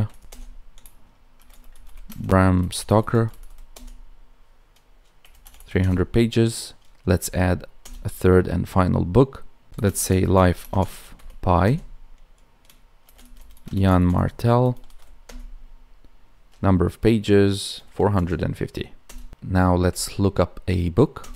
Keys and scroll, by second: 2.0 space, 9.8 space, 10.5 space, 13.6 space.